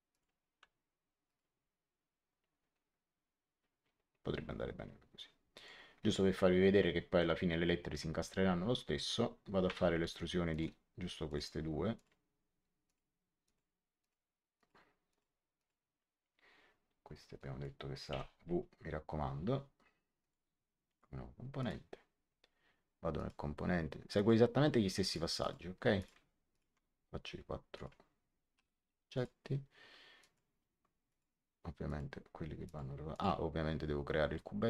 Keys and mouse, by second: 0.0 click, 1.2 click, 5.4 click, 9.6 e, 10.4 click, 17.3 click, 18.0 w, 20.1 click, 23.1 click, 26.4 click, 27.7 click, 28.5 Return, 28.5 KP_Enter, 29.1 click, 30.1 click.